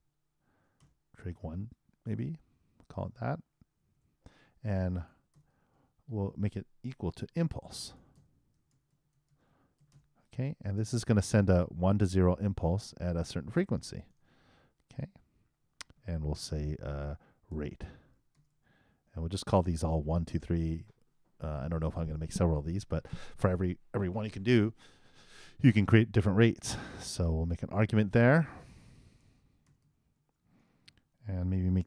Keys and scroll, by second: 7.7-8.6 typing, 10.3 shift+r, 10.7 shift+9, 13.8 shift+0, 14.2 shift+;.